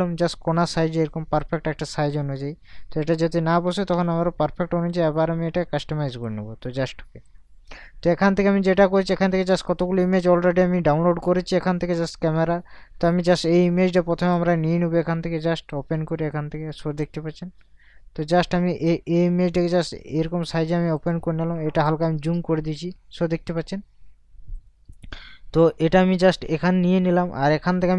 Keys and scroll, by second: 3.7 ctrl+t, 21.8 ctrl+KP_Add, 22.9 ctrl+KP_Subtract.